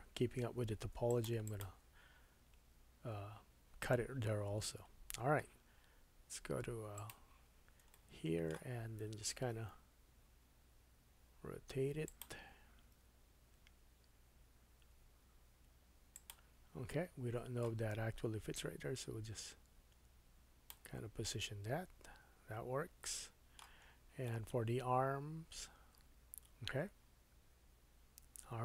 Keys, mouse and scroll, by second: 0.6 ctrl+r, 1.4 click, 1.6-6.9 middle drag, 4.7 Tab, 5.1-6.9 scroll down 2, 6.9-12.2 drag, 7.9 shift+middle click, 9.6 r, 12.2-18.5 middle drag, 12.9 g, 18.5-23.3 drag, 21.2 middle click, 23.8-24.3 scroll down 2, 24.3 middle click, 27.8 click.